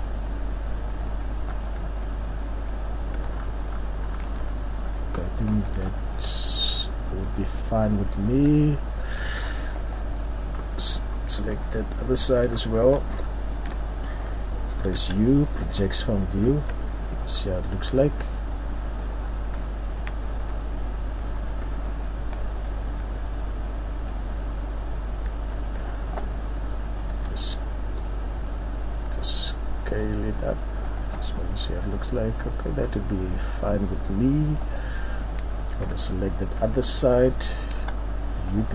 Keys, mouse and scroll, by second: 2.2 scroll down 1, 2.3 scroll up 3, 3.1 scroll up 1, 3.3 ctrl+scroll, 4.8 scroll, 4.9 scroll down 1, 5.5 ctrl+scroll up 7, 5.6 scroll, 7.0 scroll down 1, 7.3 middle click, 7.3-7.8 scroll down 2, 7.5-8.2 scroll up 5, 9.2 Tab, 9.8 right click, 10.6-11.3 scroll down 2, 11.3 scroll down 1, 11.6 KP_3, 12.6-13.2 ctrl+scroll up 1, 13.2-13.7 ctrl+scroll up 4, 13.7 scroll down 1, 13.8 scroll down 1, 15.8 u, 16.4 scroll up 1, 16.5 Tab, 16.9 middle click, 17.3-18.2 scroll up 6, 18.2 middle click, 19.3 scroll down 3, 19.5 scroll up 1, 19.6 middle click, 20.4 scroll up 1, 20.5 middle click, 21.7 middle click, 21.9 scroll down 1, 22.1 middle click, 24.3-24.6 scroll up 1, 25.3 Tab, 27.2 s, 31.2 Tab, 31.2 click, 32.5-33.1 scroll down 4, 33.5 Tab, 33.5-33.8 scroll up 1, 34.7 right click, 35.9 KP_3, 36.7-37.1 scroll down 2, 38.6 u.